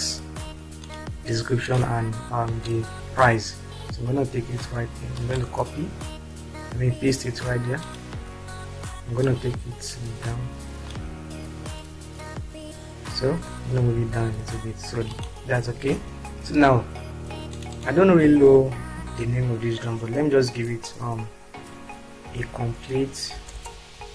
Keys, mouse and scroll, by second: 3.0-5.7 ctrl+shift+drag, 9.4 click, 13.9 Down, 18.8 ctrl+a, 22.3-24.1 typing.